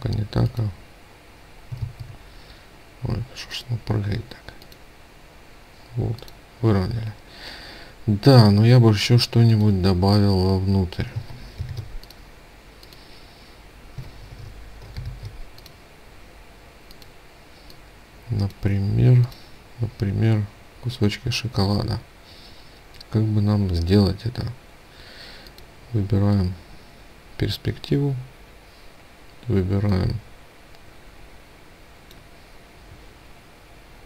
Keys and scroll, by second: 1.3 ctrl+z, 11.2 ctrl+shift+g, 14.4 ctrl+shift+g.